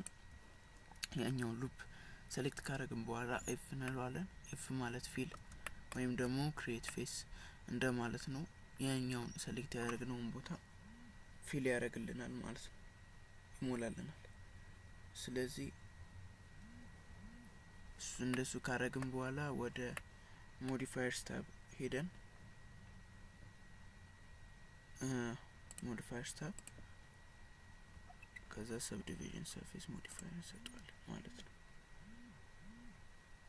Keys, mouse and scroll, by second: 0.0 alt+click, 3.4 f, 3.9 middle click, 5.8 shift+middle click, 6.3 Tab, 6.9 middle click, 18.4 middle click, 20.0 middle click, 25.8 click, 26.6 click.